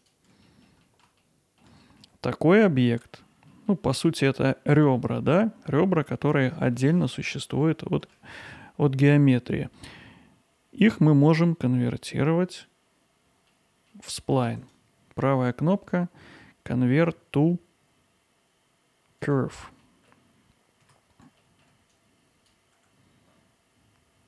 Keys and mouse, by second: 0.4 middle drag, 0.8 alt+middle drag, 1.2-1.6 ctrl+alt+middle drag, 1.9 alt+middle click, 7.8-8.1 middle drag, 14.6-19.7 right drag, 20.0 alt+middle click, 20.9 Tab, 21.4 alt+middle click, 21.9 click, 22.7 g.